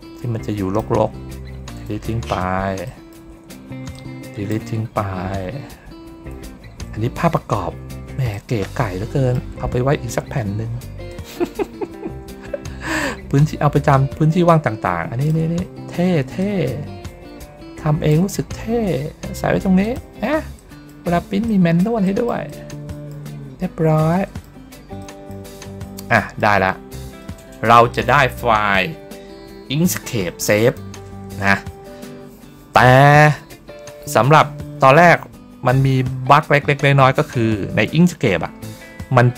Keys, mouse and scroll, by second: 2.7 middle click, 3.3 ctrl+middle click, 3.8 click, 7.0 ctrl+middle click, 8.2-9.2 middle drag, 9.6 ctrl+middle click, 11.0-15.2 drag, 15.4 ctrl+scroll up 1, 15.5 ctrl+middle click, 15.7 ctrl+middle click, 16.3-18.0 drag, 18.9 ctrl+middle click, 19.7 click, 20.4 middle click, 21.3 middle click, 21.9 middle click, 22.4 middle click, 22.8 middle click, 24.0 middle click, 24.9 middle click, 26.0 middle click, 26.5 ctrl+scroll down 1, 27.1 middle click, 30.5 click.